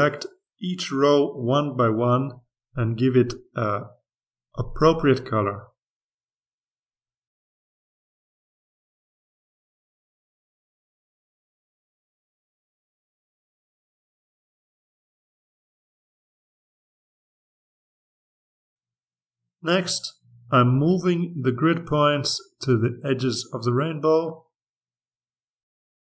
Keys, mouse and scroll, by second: 1.0-2.4 drag, 2.5-3.5 drag, 4.0-5.0 drag, 5.3 click, 6.2 click, 7.5 click, 8.7-10.2 drag, 10.5-12.0 drag, 12.5 click, 13.3 click, 14.5-15.6 drag, 16.5 click, 17.4-18.4 drag, 19.7-21.1 drag, 21.5-22.4 ctrl+scroll up 2, 22.8-23.4 scroll down 2, 24.0-25.9 drag.